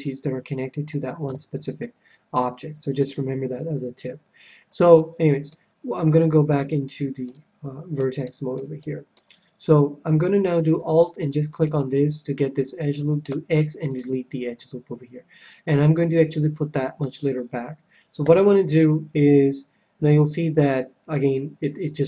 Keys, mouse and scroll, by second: 1.2 KP_7, 3.5-6.7 middle drag, 6.5-8.2 drag, 7.2-10.4 middle drag, 11.5-13.4 right drag, 13.2 x, 18.2 KP_7.